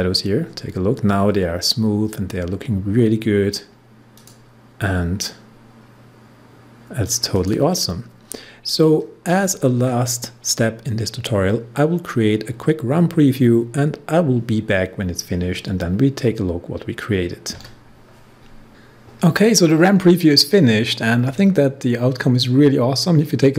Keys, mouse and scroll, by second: 3.2 scroll down 1, 4.1 click, 7.3 click.